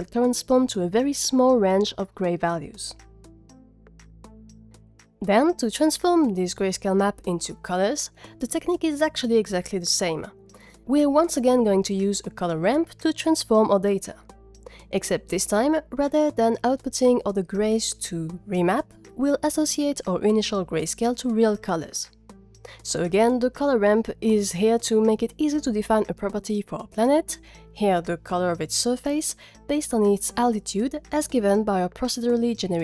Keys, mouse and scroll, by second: 0.1 click, 1.0 click, 12.1 click, 12.5 shift+a, 17.1 g, 21.9 scroll down 2, 23.1 middle click, 23.5 middle click.